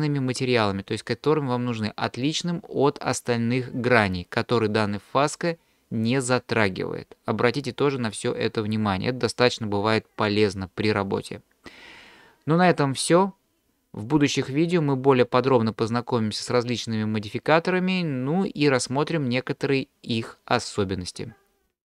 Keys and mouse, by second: 5.5-6.1 middle drag.